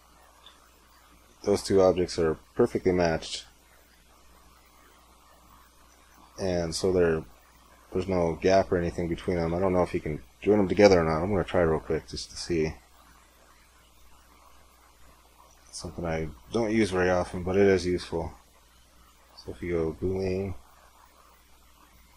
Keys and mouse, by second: 4.2 z, 5.2-6.6 middle drag, 12.5-15.3 drag, 17.8-19.8 middle drag.